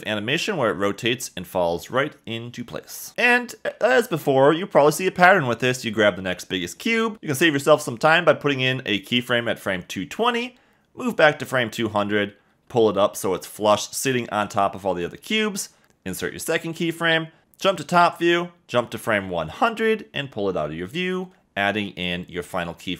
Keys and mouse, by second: 3.1 space, 3.6 click, 8.6 click, 10.1 k, 12.2 click, 13.0 g, 13.0 z, 15.1 click, 15.8 k, 19.1 click, 21.3 g, 21.5 y.